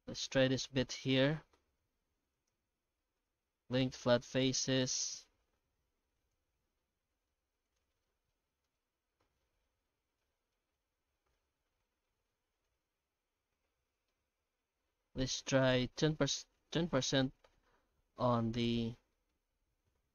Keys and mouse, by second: 0.0 Tab, 0.2 right click, 0.4 Tab, 0.8 alt+a, 1.1 middle click, 1.7 3, 2.3 alt+shift+right click, 2.8 q, 3.8 Tab, 4.4 shift+q, 8.6 alt+shift+z, 9.9-10.5 middle drag, 11.3 middle click, 11.8 shift+middle click, 12.3-12.6 middle drag, 13.9 middle click, 14.3 F9, 18.2-18.5 middle drag, 18.9 shift+middle click, 19.3-20.1 middle drag.